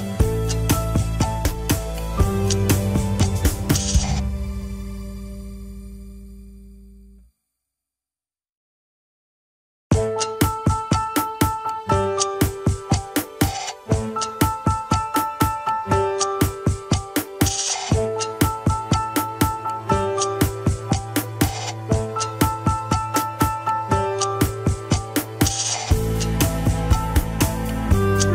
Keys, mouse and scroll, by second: 0.5-2.5 shift+middle drag, 2.5 KP_1, 3.1 scroll down 3, 3.7 ctrl+s, 4.6 ctrl+Tab, 5.0 click, 5.2 g, 8.0 r, 10.5-12.3 middle drag, 12.3-12.6 scroll up 3, 12.7-13.7 middle drag, 13.7 scroll down 2, 13.9 KP_1, 14.6 ctrl+s, 15.7 a, 16.4 alt+g, 16.7-17.1 scroll up 4, 17.1-17.9 shift+middle drag, 17.9 click, 18.6 alt+z, 19.0 alt+z, 19.2 scroll down 3, 19.7 r, 23.0-23.3 shift+middle drag, 23.3 scroll up 1, 23.9 r, 25.3 alt+z, 25.8 shift+middle click, 26.3 click, 28.0 click.